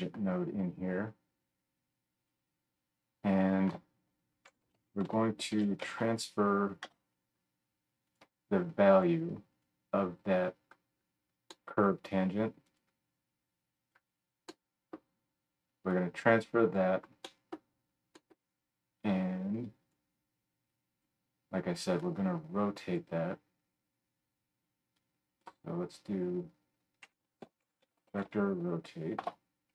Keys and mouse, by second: 3.7 F3, 9.1-11.0 middle drag, 9.2-10.7 drag, 9.2-10.7 right drag, 10.9 click, 10.9 right click, 17.7-24.0 middle drag.